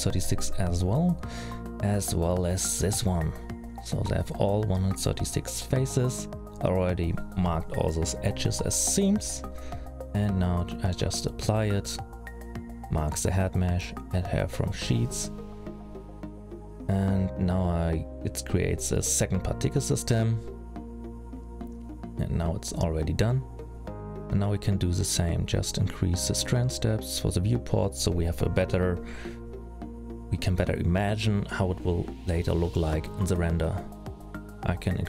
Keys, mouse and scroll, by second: 0.2-1.2 scroll down 4, 0.5-1.2 scroll up 2, 1.2 scroll up 2, 1.4 l, 4.4 alt+a, 4.8 middle click, 5.8 click, 7.5 ctrl+a, 10.1 middle click, 12.3 shift+click, 14.3 click, 21.6 middle click, 24.1-24.6 scroll down 3, 25.4 click, 27.3 click, 27.4-28.1 scroll up 6, 30.5-31.6 scroll down 9, 31.6 click.